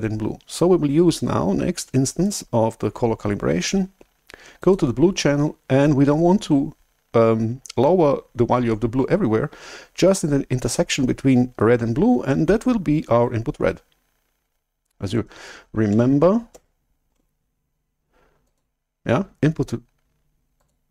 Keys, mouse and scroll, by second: 2.2-4.5 right drag, 4.5-7.1 drag, 16.0 alt+Tab, 17.3 alt+Tab, 18.4 click, 20.5 click.